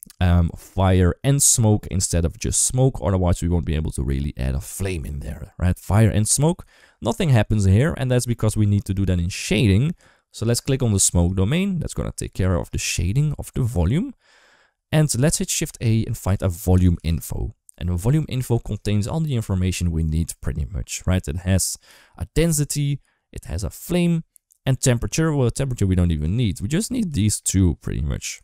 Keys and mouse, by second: 0.1-5.8 drag, 11.0 click, 12.2 middle click, 14.4 middle click, 15.5 shift+a, 18.7 shift+middle click, 20.1 shift+middle click, 26.2 shift+middle click, 26.9 d, 27.0-28.1 drag.